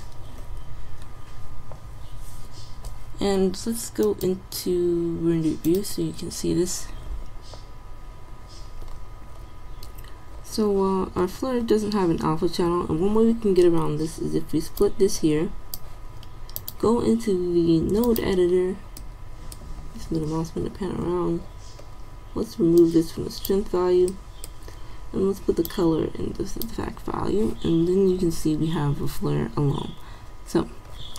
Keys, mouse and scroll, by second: 9.2 click, 15.0 click, 15.4 click, 21.1-22.9 middle drag, 22.9-24.5 drag, 25.8-27.3 drag.